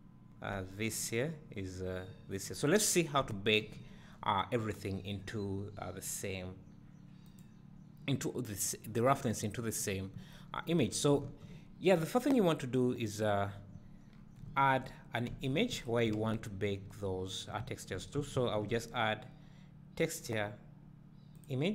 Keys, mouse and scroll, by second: 2.9 scroll down 1, 7.7 click, 10.8 scroll down 1, 11.2 `, 13.1 click, 13.7-14.1 scroll down 1.